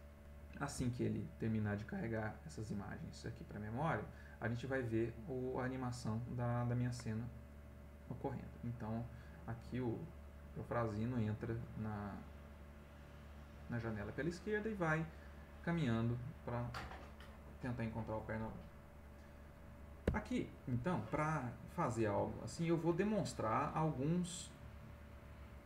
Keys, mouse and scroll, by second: 13.7 click, 19.0 click, 20.0 Escape, 21.4 click, 22.3 ctrl+click.